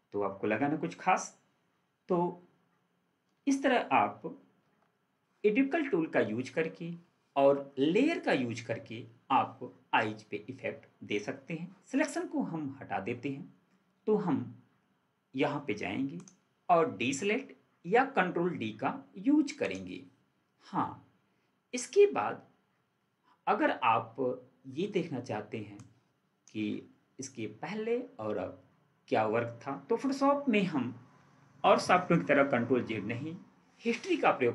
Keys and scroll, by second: 4.6 ctrl+4.